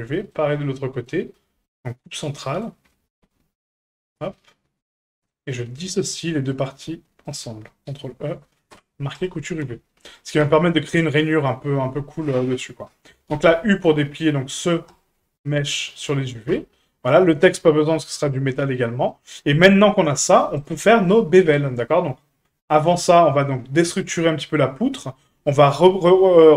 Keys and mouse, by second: 0.6 shift+middle click, 1.3 shift+middle click, 2.4 middle click, 2.9 shift+middle click, 4.0 right click, 4.3 middle click, 5.5 middle click, 7.3-8.6 ctrl+right drag, 8.6 ctrl+e, 9.6 a, 10.4 a, 13.3 u, 16.0 shift+click, 16.5 Tab, 18.2-18.5 middle drag, 19.1 middle drag, 20.6 right click, 22.2-22.5 middle drag.